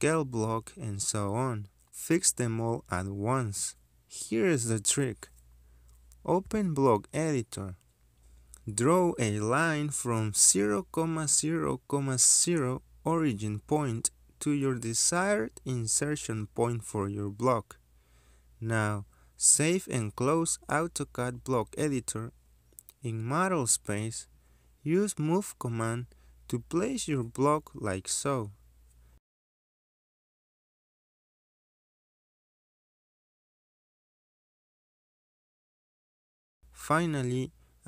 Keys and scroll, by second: 0.2 space, 1.9 Escape, 5.7 l, 6.1 Return, 6.8-7.5 typing, 8.0 Return, 17.6 Escape, 23.7 Escape, 28.3 m, 28.5 space.